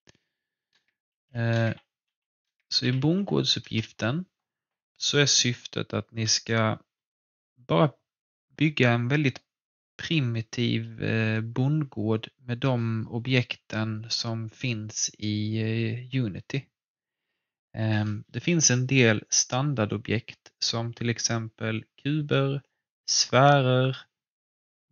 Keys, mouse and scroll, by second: 0.0-3.1 typing, 3.7 Return.